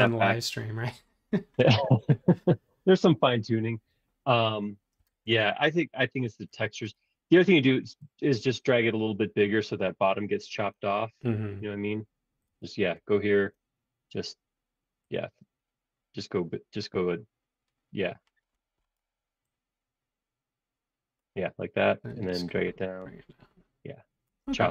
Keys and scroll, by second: 5.1 ⟲, 5.3 space.